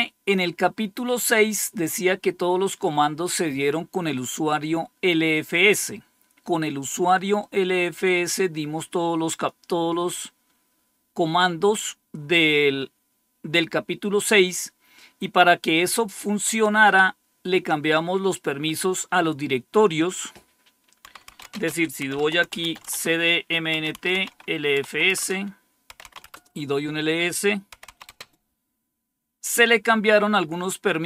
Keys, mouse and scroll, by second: 7.2-9.4 drag, 19.8 click, 20.2 click, 21.0-28.3 typing.